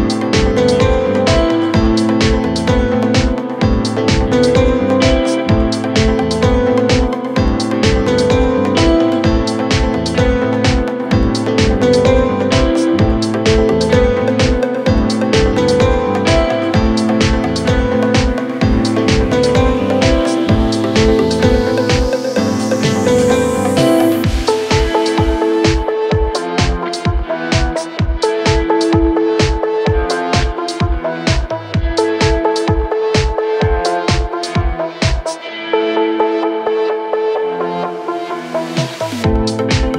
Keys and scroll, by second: 11.0 F3, 11.3 Escape, 18.5 F3, 18.8 Escape.